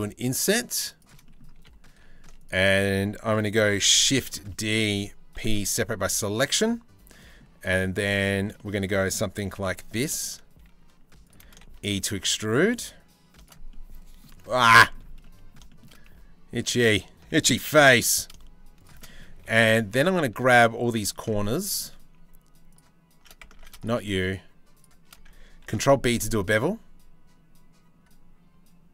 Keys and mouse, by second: 0.9 click, 1.1 3, 3.3 shift+d, 4.1 click, 5.0 p, 5.7 Tab, 6.6 Tab, 6.8 click, 7.1 a, 7.3 click, 7.8 shift+middle click, 8.2 click, 9.1 g, 11.0 e, 13.3 click, 14.2 middle click, 14.8 middle click, 15.3 shift+middle click, 16.4 alt+click, 17.3 g, 18.7 click, 19.0 2, 20.8 alt+shift+middle click, 23.1 ctrl+z, 25.2 ctrl+b.